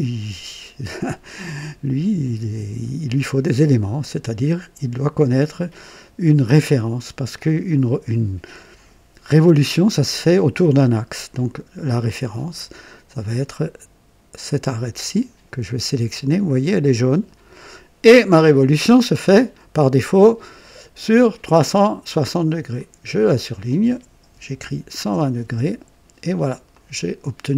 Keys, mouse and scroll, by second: 4.0 click, 11.9 click, 17.0 click, 19.1-21.2 drag, 22.7 click, 24.3 KP_1, 24.5 KP_2, 24.9 KP_0, 25.3 Return, 26.7 click.